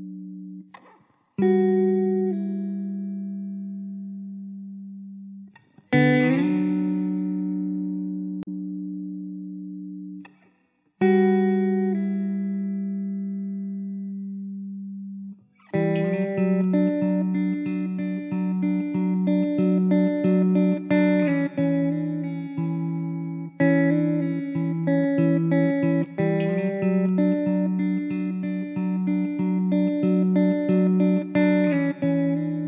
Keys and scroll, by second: 0.4 Tab, 0.8 Tab, 3.0 Tab, 3.2 1, 4.0 ctrl+z, 4.4 `, 7.1 Tab, 7.4 Tab, 8.3 ctrl+z, 9.9 alt+z, 10.5 2, 11.1 f, 11.7 Tab, 13.1 KP_0, 19.3 shift+d, 19.9 r, 20.4 r, 24.0 ctrl+z, 24.8 alt+z, 25.3 alt+z, 25.9 `, 27.5 ctrl+s, 27.7 KP_0, 31.4 `.